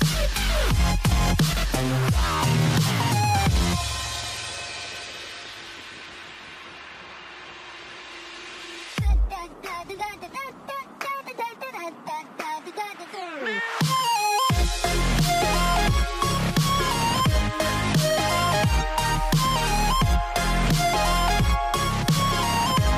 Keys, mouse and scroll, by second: 2.2-2.8 scroll up 6, 3.0-4.0 scroll down 1, 5.2-7.3 drag, 8.1 click, 9.8 f, 10.7 click, 11.1 f, 12.2 click, 12.6 f, 14.0 click, 15.0 click, 15.6 f, 16.5 click, 18.6 click, 18.9-20.9 scroll down 4, 21.2 ctrl+r.